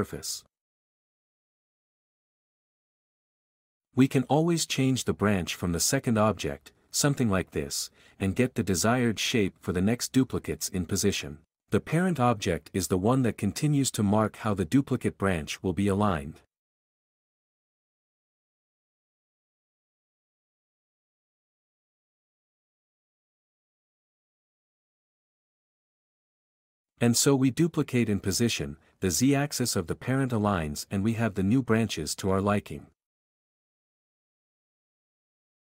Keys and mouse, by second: 3.1 click, 8.6 Down, 9.4 r, 10.3 g, 11.1 r, 13.7 g, 14.3 Escape, 18.7 k, 20.1 click, 22.6 k, 26.5 k, 29.0 click, 33.6 click, 33.8 Down, 34.4 r, 34.6 g, 35.0 r.